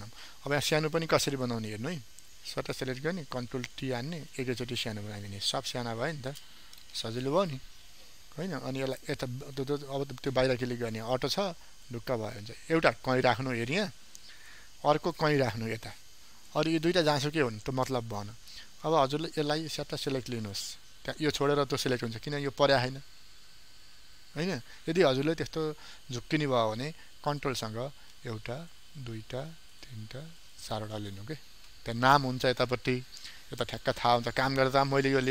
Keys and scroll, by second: 3.3 ctrl+t.